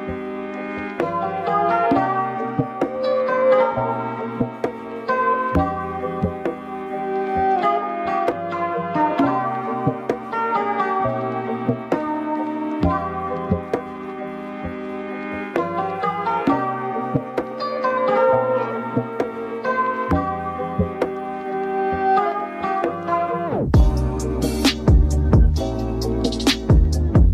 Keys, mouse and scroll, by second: 0.9 alt+z, 1.5 click, 2.3 Tab, 4.0 a, 5.1 u, 8.2-12.9 drag, 12.9-14.1 scroll up 5, 14.1 click, 15.5-24.2 drag, 25.2-27.3 drag.